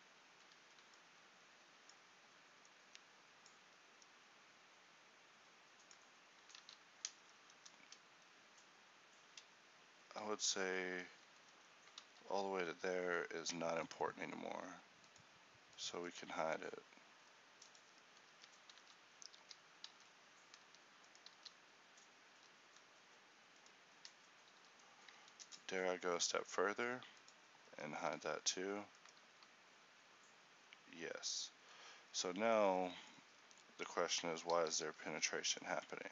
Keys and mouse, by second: 0.7 a, 2.8 ctrl+e, 6.7 ctrl+z, 7.3 ctrl+n, 10.4 z, 11.6 ctrl+n, 12.2 z, 14.0 ctrl+m, 15.7-18.4 drag, 18.4 Tab, 18.9 z, 19.5 a, 20.0 alt+a, 20.8 Escape, 21.4 g, 23.8-25.6 right drag, 24.2 Tab, 24.6 z, 25.6 ctrl+m, 27.8 Tab, 28.2 z, 29.4 g, 34.6 alt+g.